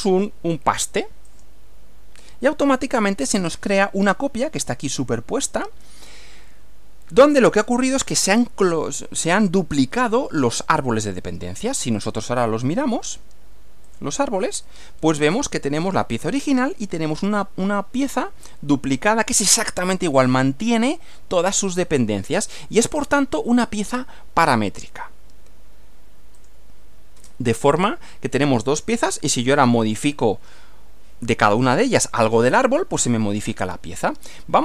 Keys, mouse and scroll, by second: 1.3 click, 10.5 click, 11.9 click, 13.9 click, 24.8 click, 26.3 click, 27.5-29.9 middle drag.